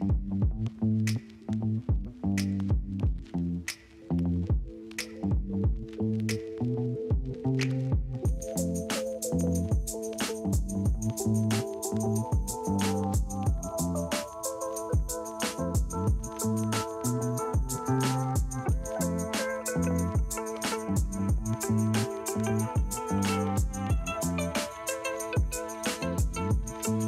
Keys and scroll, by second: 5.5 space, 5.9 space, 12.9 space, 14.0 ctrl+alt+z, 15.8 [, 18.7 space, 20.4 space, 21.0 space, 25.9 [, 26.8 space.